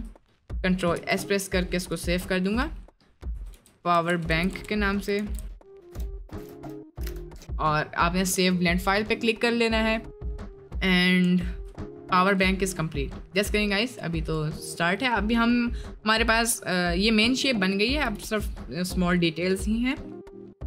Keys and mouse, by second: 1.1 ctrl+s, 10.3 right click, 10.6 middle drag, 11.3 shift+middle drag, 11.8-12.4 middle drag, 12.7-13.1 middle drag, 14.2-17.9 drag, 17.9 KP_Decimal, 20.5 click.